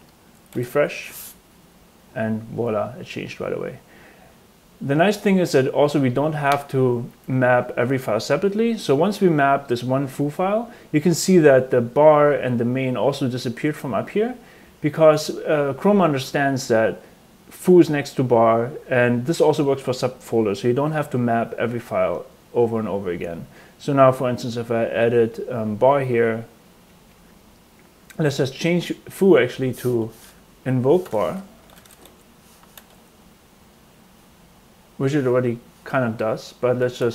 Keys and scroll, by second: 1.3 super+r, 29.9 Return, 30.4-33.3 typing, 31.1 Tab, 36.7-37.1 typing.